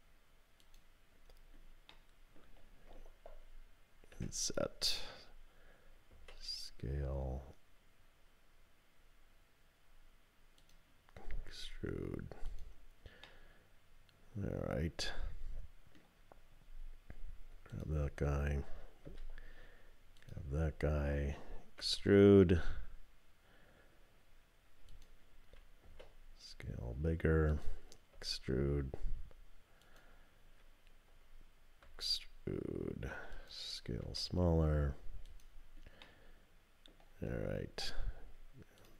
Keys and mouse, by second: 1.9 middle click, 4.1 i, 6.1 s, 11.3 e, 13.3-16.0 drag, 17.7 click, 19.1 3, 20.2 click, 21.8 e, 25.8 s, 28.1 e, 31.8 e, 34.0 s, 36.0 click.